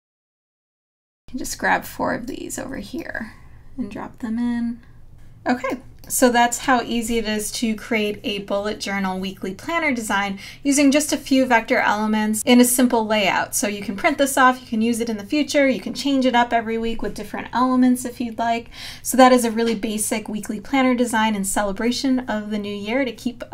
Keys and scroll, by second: 5.1 space.